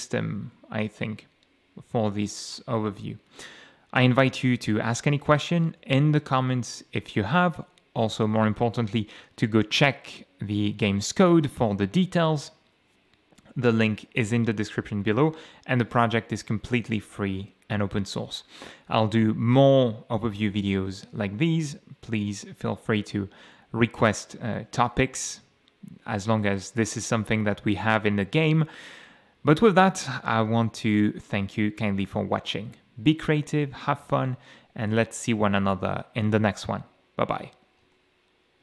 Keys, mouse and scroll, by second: 3.2 a, 4.1 d, 5.3 a, 5.8 m, 7.3 w, 8.3 e, 16.3-18.1 typing, 20.3 m, 21.0 a, 24.1 d, 25.9 d, 27.7-30.1 typing, 31.8 d, 32.9 a, 33.6 d, 34.0 space, 34.3 d, 35.8 a.